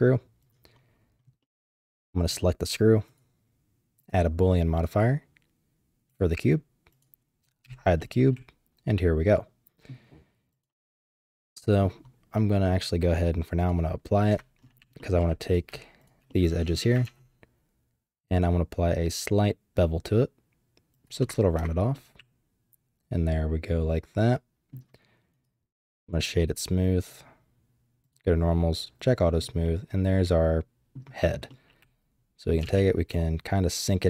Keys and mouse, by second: 0.4 click, 1.4 middle click, 2.2 click, 3.2 click, 5.9-7.6 typing, 6.9 click, 8.0-9.9 drag, 10.5 click, 11.5 middle click, 11.8 click, 12.7 click, 14.1-15.7 typing, 15.0 click, 15.5 click, 16.0 shift+click, 16.3 click, 17.0 ctrl+b, 21.6 Tab, 21.9-22.4 drag, 22.4-24.7 middle drag, 25.4 click, 27.1 click, 28.1 click, 29.0 click, 29.6-30.9 middle drag, 31.5-32.5 middle drag, 32.6 g.